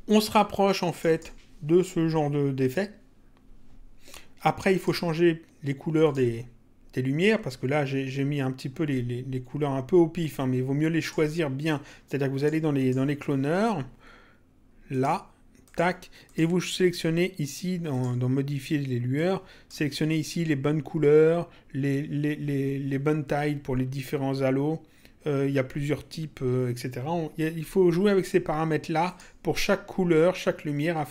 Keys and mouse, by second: 0.9 click, 4.7 click, 6.0 click, 10.3 click, 12.3 click, 14.9 click, 17.9 click, 19.1 click, 29.0 click.